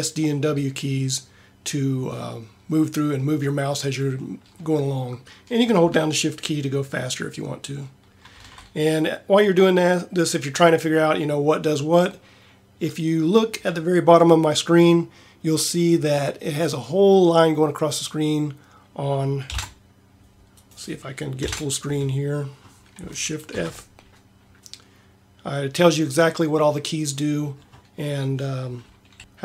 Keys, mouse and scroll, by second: 21.3 ctrl+Up, 23.4 shift+f.